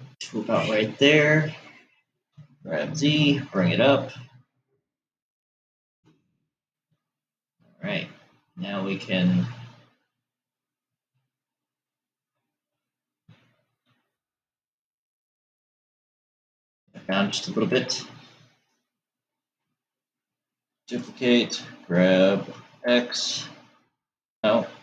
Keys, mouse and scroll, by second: 2.8 g, 7.7-11.2 middle drag, 14.3 g, 21.3 shift+d.